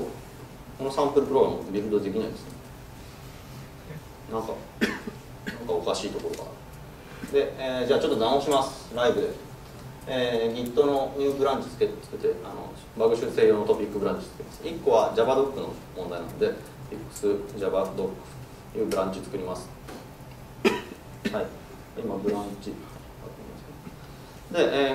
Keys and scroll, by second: 2.9 ctrl+shift+super+F12.